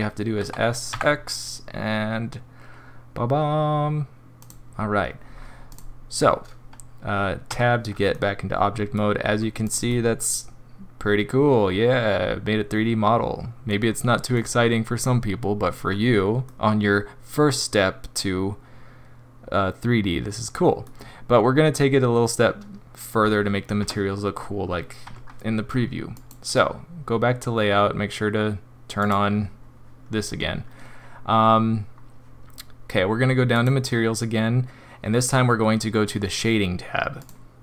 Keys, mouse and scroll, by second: 0.4 s, 5.3-5.8 scroll down 2, 5.7 click, 7.5 Tab, 8.1 middle click, 9.2-9.6 scroll up 2, 9.6 click, 9.9 middle click, 13.6 middle click, 13.8-14.4 scroll up 3, 14.4 middle click, 16.5 middle click, 17.8 middle click, 18.2 middle click, 23.8 Tab, 25.0 Tab.